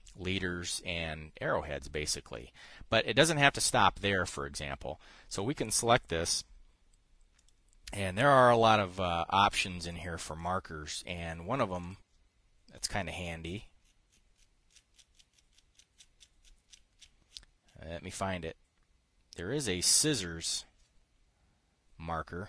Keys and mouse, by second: 5.8 click, 7.8 click, 10.4 click, 10.9 click, 12.3 click, 20.5 click.